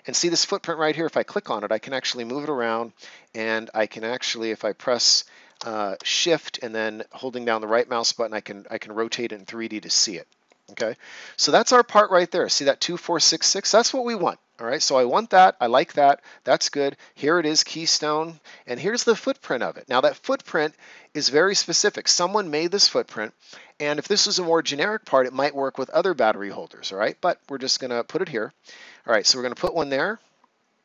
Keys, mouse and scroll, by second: 1.0 click, 1.6 right click, 6.6 shift+right click, 15.1 click, 27.0 click.